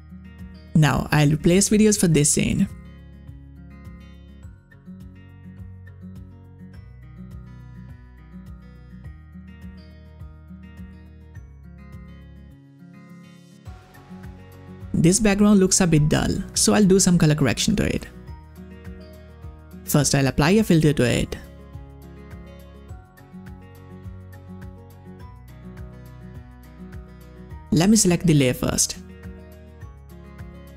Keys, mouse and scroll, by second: 1.2-15.4 drag, 19.2 click, 19.3 click, 21.3 click, 21.4 scroll down 1, 21.9-22.5 scroll down 2, 23.4 scroll down 1, 28.2 scroll down 1, 28.3 click, 28.9-29.4 scroll down 2, 30.0 scroll down 1, 30.5 scroll down 1.